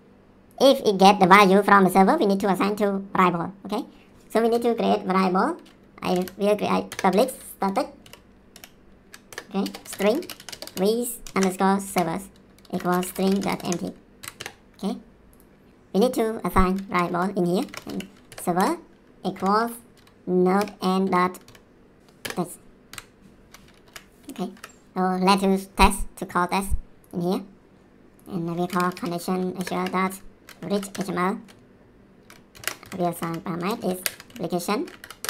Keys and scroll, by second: 5.8-11.3 typing, 6.9 Return, 9.3 Return, 11.8 ctrl+v, 12.5-14.2 typing, 14.4 Return, 16.9-22.9 typing, 18.6 Return, 22.2 Return, 23.8 ctrl+s, 24.5 Down, 28.4-29.7 typing, 29.6 Return, 30.7 Down, 30.9 Return, 32.2-35.2 typing, 35.0 Down.